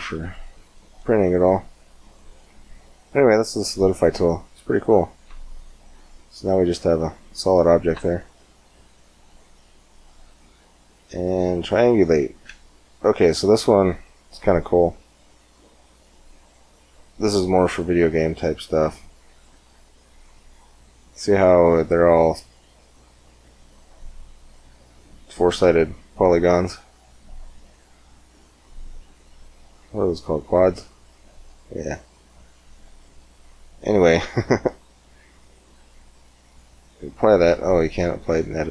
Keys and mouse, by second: 0.4-3.0 drag, 3.0-4.2 middle drag, 4.2 click, 5.1 Tab, 5.9 click, 7.8 Tab, 10.9 middle click, 12.2 Tab, 12.9-17.0 drag, 19.4 Tab, 20.7 Tab, 27.3-29.6 middle drag, 36.3-38.0 drag, 37.9 Tab.